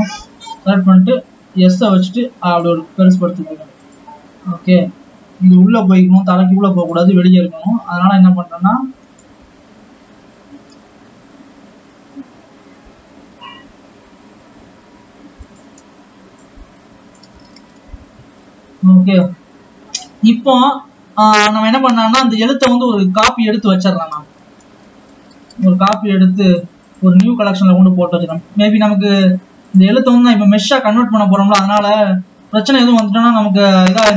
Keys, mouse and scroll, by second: 1.7 s, 3.9 scroll up 6, 4.2 click, 6.7 g, 7.9-8.6 scroll down 3, 8.6 click, 11.6 g, 16.7-17.3 scroll down 3, 17.3-17.9 scroll down 1, 17.9 click, 18.7 ctrl+s, 18.7-20.2 scroll down 7, 20.2 click, 21.1-22.7 scroll up 2, 22.7-24.7 scroll up 1, 24.7 click, 24.9 shift+d, 27.1-28.7 right drag, 28.7 click, 29.6 click, 30.9-32.6 right drag, 33.0 right click.